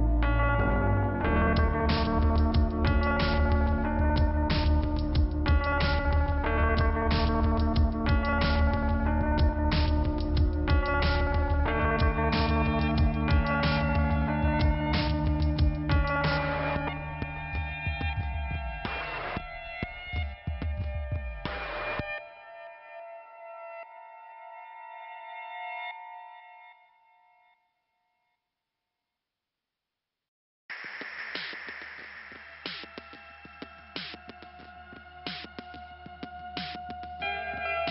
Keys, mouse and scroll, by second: 1.2 click, 1.6 scroll down 2, 3.5 click, 5.4 click, 6.7 click, 7.4 scroll up 2, 8.1-9.0 scroll down 1, 10.1 click, 10.5 right click, 11.5 click, 12.4 scroll up 1, 13.3 click, 13.7 click, 13.7 double click, 14.2 double click, 14.5 double click, 14.7 double click, 15.3 double click, 16.0 click, 16.7 click, 17.2 click, 18.8-19.6 scroll down 2, 23.5 scroll up 1, 23.9 click, 24.5 click, 25.3 click, 26.1 click, 26.9 click, 27.5 click, 28.3 click, 29.1 click, 30.0 right click, 31.3-32.0 scroll down 2, 33.1 middle click, 34.3 click, 36.9 click, 36.9 click.